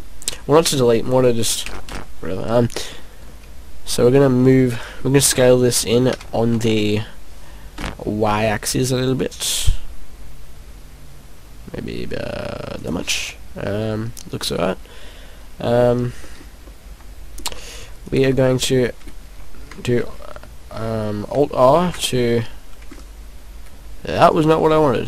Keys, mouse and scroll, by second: 1.6 a, 1.8 a, 2.9 middle click, 3.9 middle click, 4.4 middle click, 5.3 s, 12.8 click, 13.1 middle click, 16.2 middle click, 16.7 middle click, 18.2 right click, 18.3 middle click, 21.7 alt+r, 22.9 middle click, 24.2-24.5 scroll up 3, 24.6 middle click.